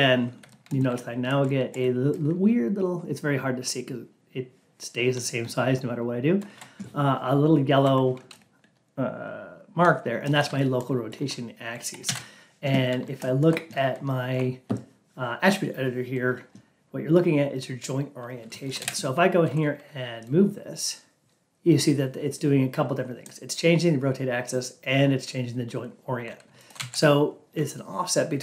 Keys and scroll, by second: 12.0 ctrl+a.